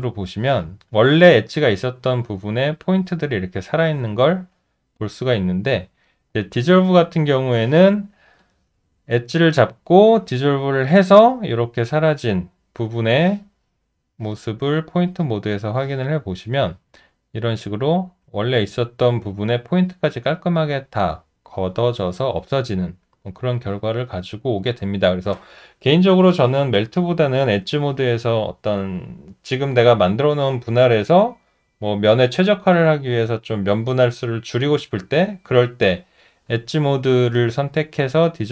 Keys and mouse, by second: 5.6 alt+middle click, 6.1 alt+right click, 6.5 alt+middle click, 7.1 alt+right click, 7.3 alt+double right click, 16.4 alt+middle click, 17.8 alt+right click, 23.2 alt+right click, 24.0 alt+middle click, 24.6 alt+right click.